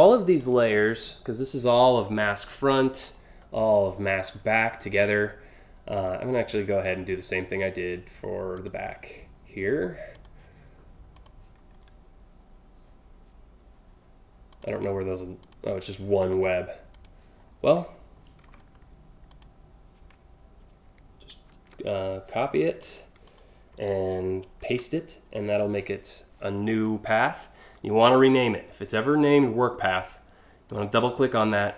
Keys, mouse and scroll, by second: 0.0 click, 2.7 scroll down 1, 4.0 scroll down 1, 5.6 click, 6.2 scroll down 6, 8.1 click, 9.8 click, 14.1 click, 15.0 click, 16.6 click, 18.1 a, 18.9 click, 21.1 ctrl+c, 22.4 click, 22.9 click, 25.5 v, 30.3 click, 30.4 click.